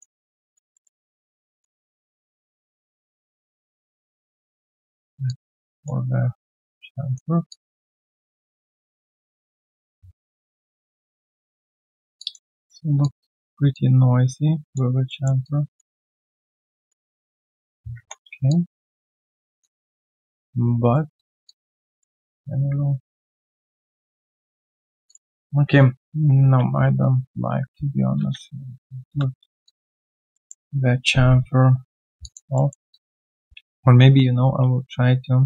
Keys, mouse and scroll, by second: 0.2 alt+right click, 0.4 alt+click, 0.7 alt+middle click, 1.0 alt+click, 7.5 alt+click, 8.1 alt+middle click, 8.4 alt+scroll down 1, 8.6 alt+click, 10.0 alt+right click, 10.3 alt+click, 12.1 alt+click, 12.5 alt+middle click, 12.8 alt+right click, 13.0 alt+click, 13.3 alt+middle click, 13.7 alt+click, 15.0 alt+middle click, 15.4 alt+click, 15.8 alt+right click, 16.1 alt+middle click, 16.5 alt+click, 17.0 alt+middle click, 17.3 alt+click, 18.4 alt+click, 19.3 alt+scroll down 1, 19.6 alt+click, 19.9 alt+middle click, 20.1-20.4 alt+scroll down 1, 20.4 right click, 21.4 right click, 21.8 alt+middle click, 22.1 alt+click, 23.8 alt+middle click, 24.2 alt+click, 25.9 ctrl+z, 26.4 ctrl+z, 29.6 alt+click, 29.9 alt+right click, 30.3 alt+middle click, 32.2 alt+click, 32.5 alt+middle click, 32.9 alt+click, 33.5 ctrl+z, 33.9 ctrl+z, 34.9 ctrl+z.